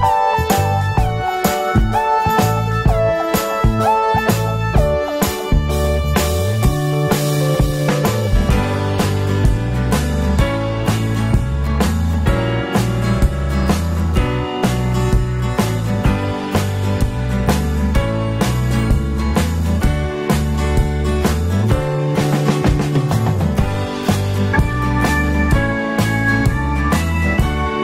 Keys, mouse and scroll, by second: 14.6 click, 15.5 click, 16.0 click, 17.2 ctrl+z, 18.1 ctrl+click.